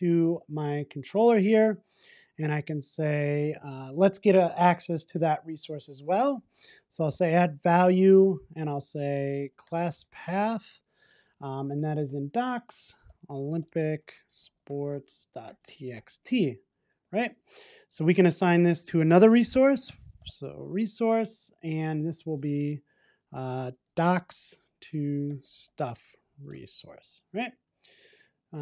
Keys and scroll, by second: 7.0 Return.